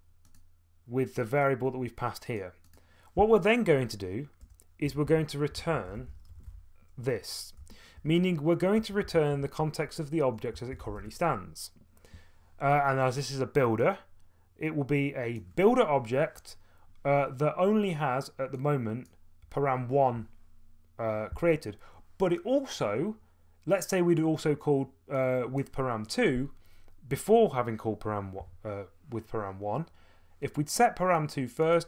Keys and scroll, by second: 4.4 Return, 4.8-9.5 typing, 7.6 Return, 10.6-11.4 typing.